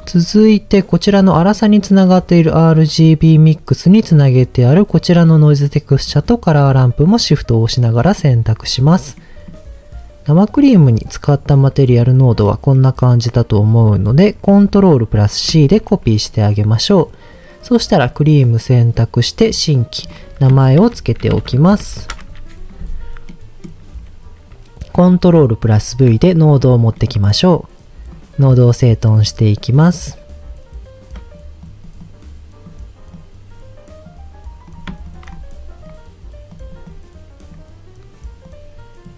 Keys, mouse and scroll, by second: 0.4 middle click, 2.3-3.0 scroll up 3, 3.0 middle click, 5.2 shift+click, 6.1 shift+click, 7.8 middle click, 8.7 scroll down 2, 9.1 middle click, 10.5-12.4 middle drag, 12.7 middle click, 15.5 ctrl+c, 18.0 click, 19.3 click, 20.0-22.0 drag, 22.9-23.6 scroll down 2, 23.3 middle click, 25.7 ctrl+v, 26.5 scroll down 2, 26.9 middle click, 28.1 click, 29.1 drag, 29.7-31.3 drag, 31.6 click, 32.0 click, 33.1-34.1 drag, 34.6 click, 35.1 shift+click, 35.3 click, 36.5 click, 36.9 click, 38.4-39.1 drag.